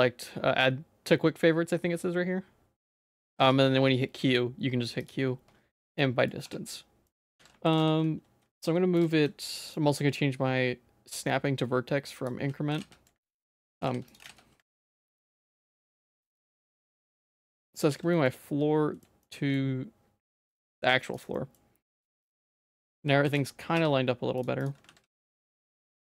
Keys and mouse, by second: 3.4 q, 6.0 middle click, 6.4 Tab, 7.0 middle click, 7.4 ctrl+s, 7.8 g, 9.8-12.3 drag, 12.7 g, 14.2 g, 16.0-17.2 middle drag, 17.5 middle click, 17.9 ctrl+s, 18.1 middle click, 18.5 shift+middle click, 19.2 middle click, 20.3 middle click, 20.7 shift+middle click, 21.1 click, 21.3 middle click, 22.0 click, 22.1 shift+middle click, 22.8 shift+middle click, 23.2 g, 24.9 ctrl+s, 25.9 middle click.